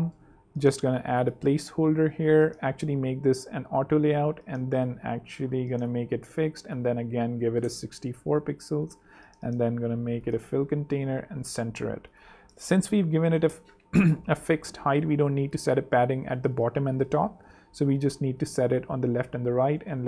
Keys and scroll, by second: 2.3 shift+a, 7.0-7.9 typing, 12.5 0, 12.7 Tab, 13.2 0, 13.4 Return, 15.1 ⟲, 19.2-20.0 typing.